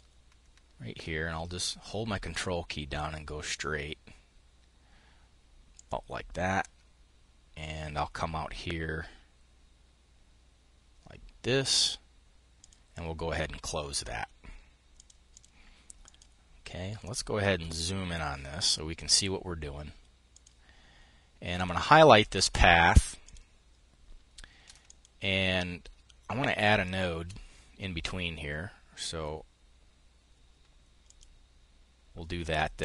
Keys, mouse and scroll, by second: 11.1 click, 12.0 click, 14.4-15.5 drag, 16.5-18.3 drag, 19.7-20.9 drag, 21.0 click, 22.7 click, 24.3 click, 25.9-27.3 shift+drag, 30.5 click, 32.7 click.